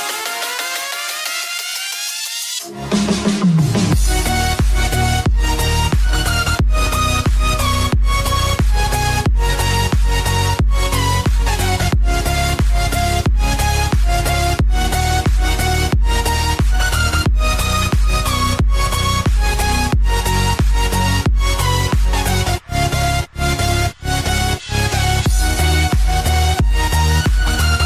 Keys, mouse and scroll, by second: 0.2-1.6 typing, 0.4 click, 1.1 click, 1.9 click, 4.0-5.6 typing, 4.5 click, 5.8 click, 7.4 typing, 7.5 click, 11.4 scroll down 1, 12.9-13.3 scroll up 1, 13.4-14.3 typing, 14.6 click, 19.4-19.7 scroll down 1, 21.1 right click, 23.1 click, 25.8 click.